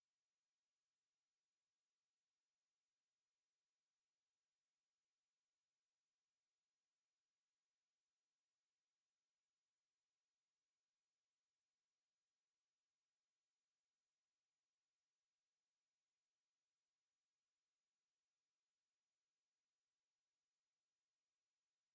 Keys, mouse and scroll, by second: 0.5 click, 2.9 click, 2.9 scroll up 5, 3.2 shift+middle click, 3.7 scroll up 2, 4.0 shift+middle click, 4.8 click, 6.3 click, 7.0 KP_7, 8.6 click, 10.1 click, 11.2 ctrl+KP_7, 12.3 click, 12.7 shift+middle click, 13.9 click, 14.7 a, 15.5 click, 17.3 s, 18.6 KP_7, 19.6 KP_1, 21.0 Tab.